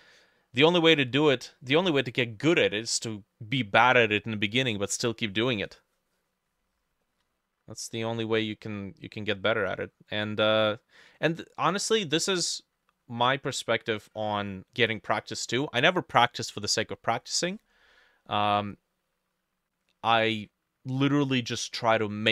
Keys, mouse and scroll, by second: 0.0 middle click, 5.3 middle click, 7.1 middle click, 8.0 middle click, 9.4 middle click.